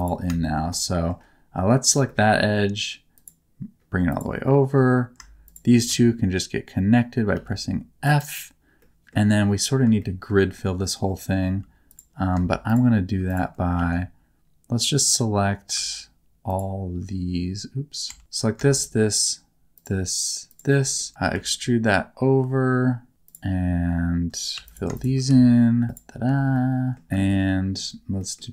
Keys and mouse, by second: 0.0 click, 0.4 shift+middle click, 0.7 middle click, 1.9 e, 3.1-4.2 drag, 4.4 middle click, 5.5 shift+click, 5.9 f, 7.3 g, 8.0 right click, 8.8 middle click, 10.0 shift+middle click, 11.5 2, 11.9 click, 12.7 click, 13.8 1, 16.5 click, 18.1 Tab, 18.2 Tab, 18.8-20.2 drag, 21.0 middle click, 21.3 e, 23.3-24.5 drag, 24.5 2, 24.6 click, 25.3 f, 25.8 shift+click, 26.3 f, 26.5 middle click, 27.0 1, 27.3 shift+middle click, 28.2 middle click.